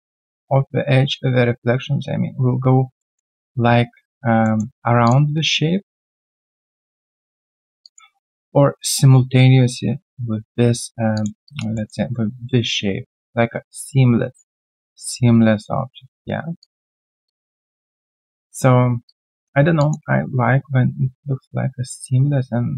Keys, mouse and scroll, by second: 3.0 alt+middle click, 4.4 alt+middle click, 4.6 alt+scroll down 1, 7.8 alt+click, 11.1 alt+click, 11.4 alt+double click, 11.7 alt+middle click, 16.6 alt+click, 17.0 alt+right click, 17.2 alt+click, 18.7 scroll down 2.